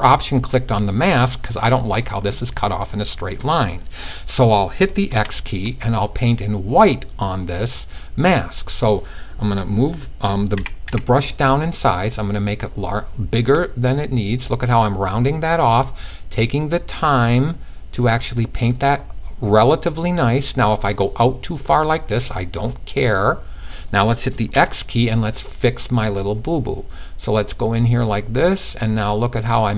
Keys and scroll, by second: 4.6 x, 10.2 typing, 24.0 x.